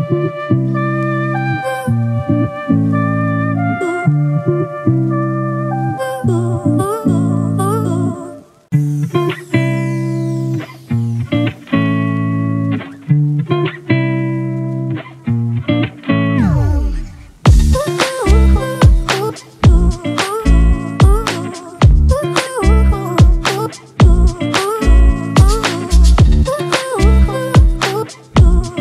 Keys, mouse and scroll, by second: 10.5 Return.